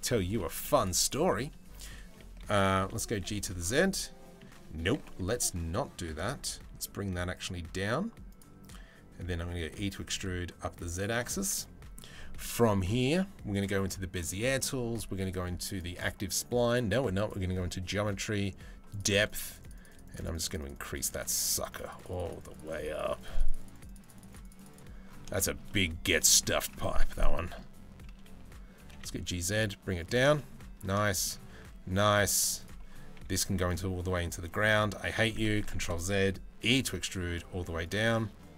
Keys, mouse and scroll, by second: 0.7 click, 1.4 click, 2.0 g, 2.8 z, 3.6 middle click, 4.5 g, 8.9 e, 11.1 Tab, 11.2-11.6 middle drag, 15.3 click, 16.3 click, 16.8 click, 18.5 click, 18.9 click, 25.0 shift+middle click, 25.3 middle click, 25.9 shift+middle click, 26.2 middle click, 26.7 Tab, 26.9 middle click, 28.4 g, 30.0 shift+middle click, 30.7 shift+middle click, 31.3 a, 32.8 g, 35.2 ctrl+z, 36.3 e, 38.4 a.